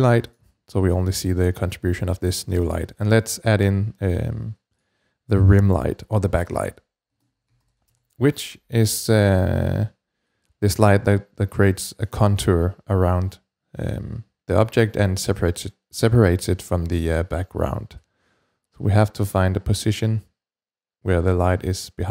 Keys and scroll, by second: 5.6-8.9 typing.